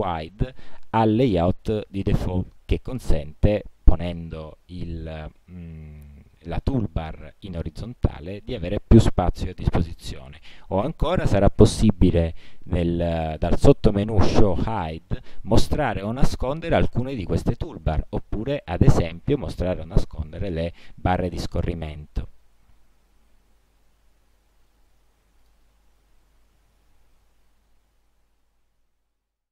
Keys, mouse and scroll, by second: 2.3 click, 11.2 click, 18.8 click, 21.8 middle click, 21.8 scroll, 25.6 click.